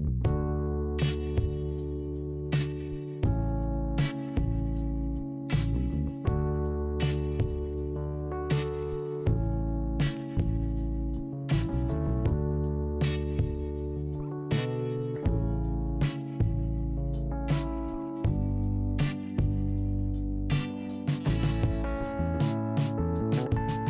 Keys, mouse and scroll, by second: 5.9 scroll down 1, 6.8 scroll up 1, 7.5 scroll down 1, 8.7 scroll down 1, 8.7 click, 8.8 click, 10.5 click, 17.0 click, 17.2 click, 18.4 click, 20.6 scroll down 1, 22.1 click, 23.4 scroll up 1.